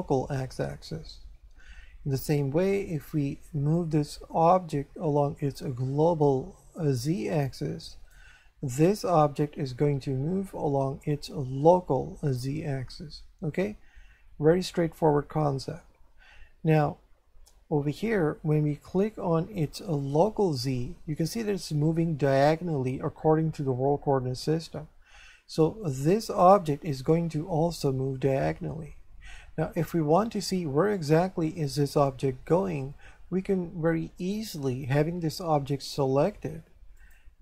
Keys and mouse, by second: 3.7 click, 20.0 click, 26.4 right click, 37.0 click.